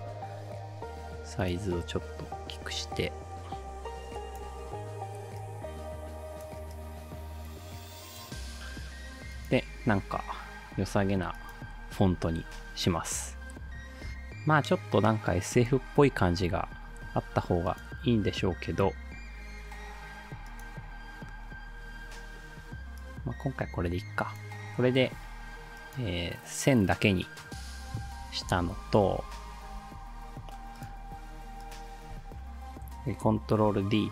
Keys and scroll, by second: 28.5 Down, 28.7 Down, 29.1 Left, 29.6 Up, 33.7 ctrl+d.